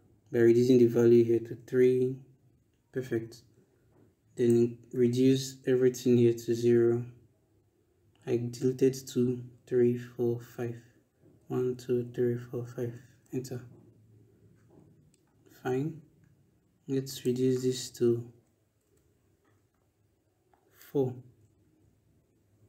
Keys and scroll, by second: 0.4 3, 1.4 Return, 5.5 BackSpace, 9.3 BackSpace, 11.2 0, 13.0 Return, 18.1 Right, 18.7 BackSpace, 20.6 4, 21.4 Return.